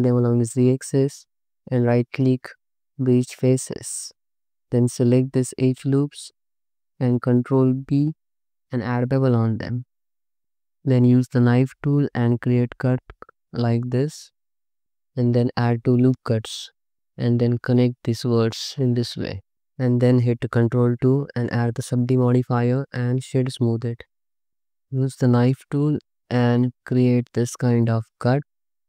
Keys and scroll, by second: 3.8 2, 7.5 ctrl+b, 10.0 Tab, 10.7-14.2 typing, 15.2 ctrl+r, 16.2 1, 17.1 space, 18.5 space, 19.0 c, 19.5 Tab, 20.8 ctrl+2, 24.5 alt+shift+z, 25.2 1, 27.5 space.